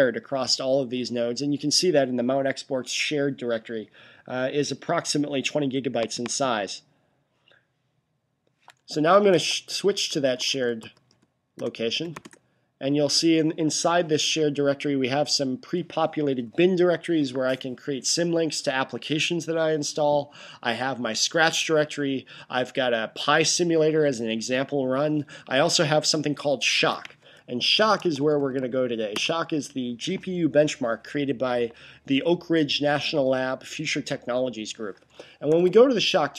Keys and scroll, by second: 8.7-12.4 typing, 27.4-28.9 typing, 35.0-35.9 typing.